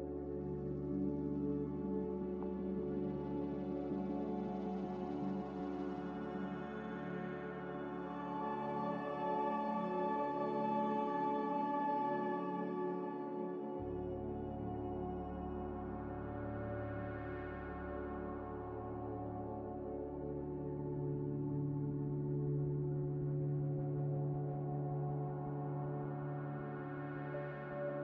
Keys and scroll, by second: 1.5-2.7 typing.